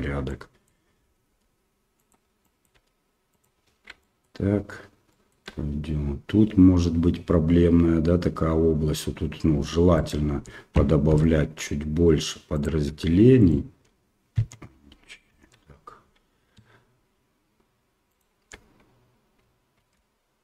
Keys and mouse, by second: 0.3 click, 1.3 g, 2.5 click, 2.7 g, 4.0 shift+middle click, 5.2 shift+middle click, 9.9 alt+right click, 11.1 ctrl+b, 13.2-13.8 space, 13.4 right click, 14.3 space, 15.3 shift+Left, 18.1 alt+right click, 19.8 ctrl+b.